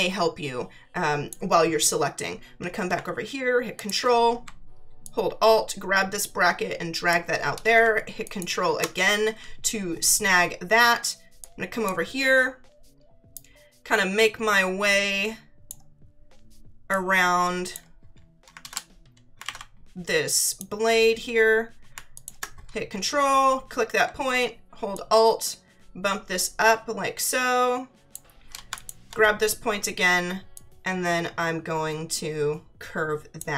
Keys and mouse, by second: 3.8 ctrl+click, 5.0 alt+click, 8.2 ctrl+click, 11.4 click, 13.3 click, 16.9 click, 19.4 ctrl+z, 20.4 click, 22.1 click, 24.9 click, 28.7 ctrl+click, 30.5 click.